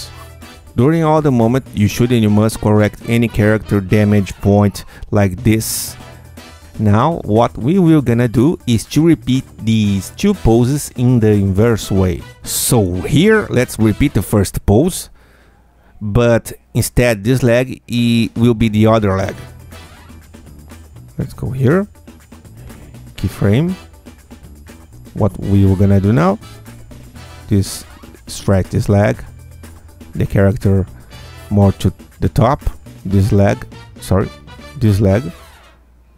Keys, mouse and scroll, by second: 2.0-2.6 scroll up 4, 2.8 click, 3.1 scroll up 2, 3.7 Tab, 4.1 click, 4.9-6.8 drag, 7.0 Tab, 7.7-8.0 scroll down 2, 11.2-11.7 scroll down 4, 12.8 click, 21.6 click, 22.3 click, 23.7 ctrl+F2, 24.7 Tab, 26.1 q, 26.9-28.9 alt+drag, 29.9-32.0 alt+drag, 33.0 q, 33.5 alt+click, 34.4 ctrl+alt+z, 34.9 ctrl+alt+click, 35.1 ctrl+alt+q, 35.3-36.1 ctrl+alt+drag.